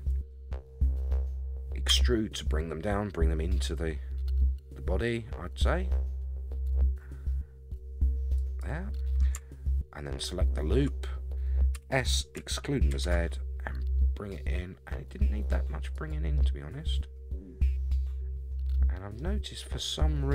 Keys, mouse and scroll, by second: 0.3 shift+middle click, 1.0-1.9 scroll up 3, 1.9 e, 10.2 alt+click, 11.7 s, 16.3-19.2 middle drag, 19.3-20.0 scroll down 8, 20.0 middle click.